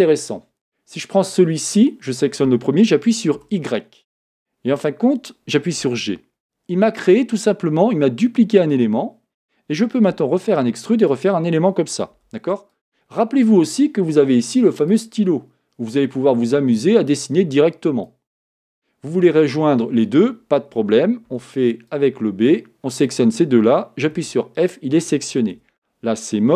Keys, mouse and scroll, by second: 1.7 click, 3.4 y, 8.2 g, 10.2 e, 12.2 e, 14.8-20.8 drag, 20.8 a, 21.3 b, 25.6 Escape, 25.6 e.